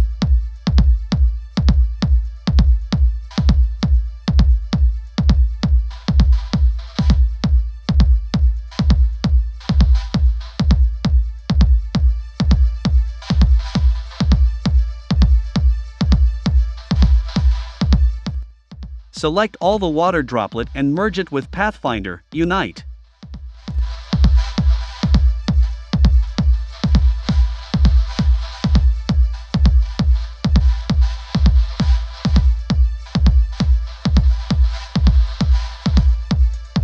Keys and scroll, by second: 5.1 shift+Down, 12.1 Up, 15.4 v, 31.1 i, 32.1 v.